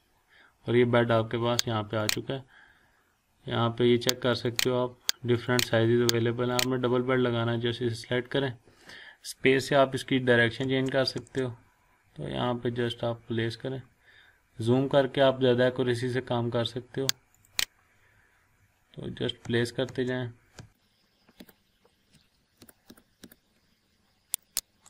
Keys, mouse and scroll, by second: 2.0 click, 4.3 click, 7.2 click, 10.6 space, 13.8-14.1 scroll up 1, 14.8 scroll down 1, 17.3 click, 17.8 scroll down 1, 19.4 space, 20.9 scroll up 1, 21.4 space, 22.6 space, 24.4 click, 24.6 scroll down 1.